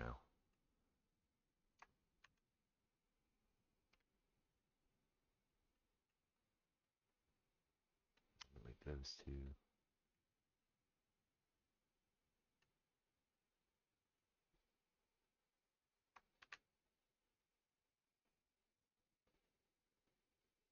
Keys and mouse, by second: 2.2 shift+r, 3.9 m, 16.4 shift+r.